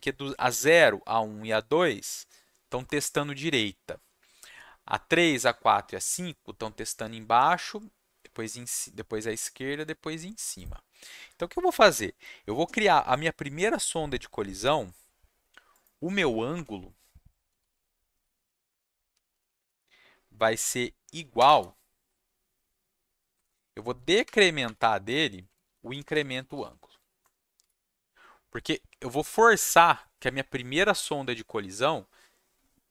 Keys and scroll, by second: 16.5 Return, 17.2-19.9 typing, 21.3 =, 23.3-27.6 typing.